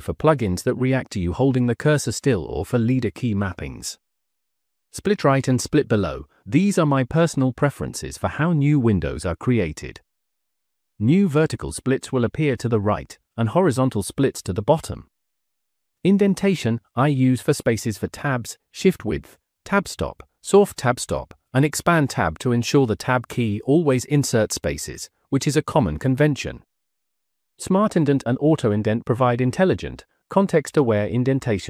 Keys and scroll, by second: 4.1 Escape, 4.4-6.3 typing, 14.7 Escape, 15.2 j, 15.5 j, 18.8 shift+v, 22.4 j, 22.7 j, 23.0 j, 23.8 j, 29.8-30.8 typing.